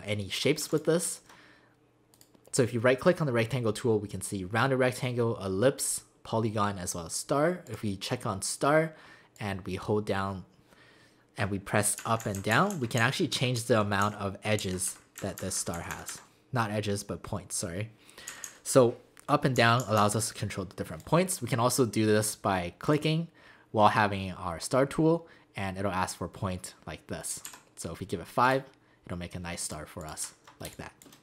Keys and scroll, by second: 0.6 v, 12.0 Up, 12.2 Down, 12.4 Up, 12.6 Down, 12.7 Up, 13.0 Up, 13.4 Up, 13.6 Up, 14.1 Up, 14.6 Up, 14.9 Up, 15.2 Down, 15.4 Down, 15.6 Down, 15.8 Down, 16.0 Down, 16.1 Down, 18.3 Up, 18.5 Up, 19.6 Down, 19.9 Down, 20.0 Down, 27.5 KP_5, 30.7 space.